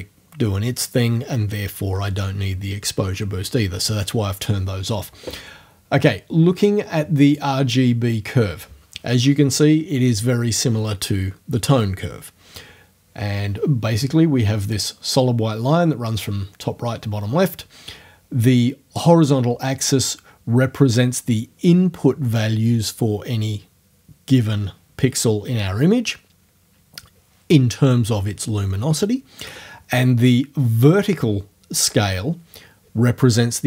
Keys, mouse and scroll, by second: 7.3 click.